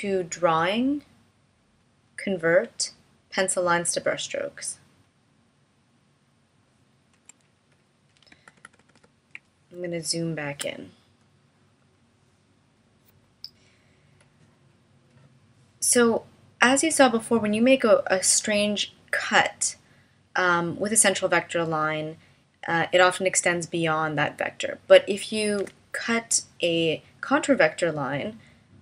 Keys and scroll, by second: 8.4 super+=, 9.9 space, 25.6 BackSpace.